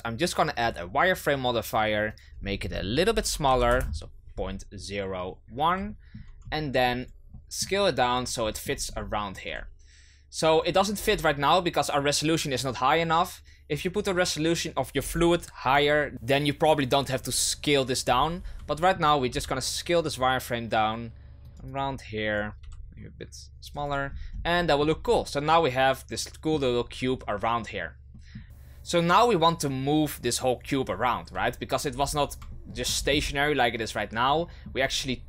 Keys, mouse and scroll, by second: 0.6-5.2 drag, 5.8-6.3 shift+middle drag, 6.3-7.0 scroll up 5, 7.0 right click, 7.3-8.1 middle drag, 8.1 right click, 8.4-8.8 shift+middle drag, 8.8-9.4 scroll up 3, 9.4 s, 10.9-12.0 scroll down 4, 16.1 right click, 17.2 right click, 18.0-18.6 scroll up 6, 18.6-19.2 shift+middle drag, 19.2 s, 21.6 right click, 22.3 right click, 22.6 s, 23.8 right click, 24.0-24.5 scroll down 5, 24.5-25.0 shift+middle drag, 25.0 scroll down 2, 25.5-28.4 middle drag, 28.4 right click, 31.8 shift+c, 32.5-32.9 shift+middle drag, 32.9-34.3 scroll up 6, 34.3-35.2 shift+middle drag.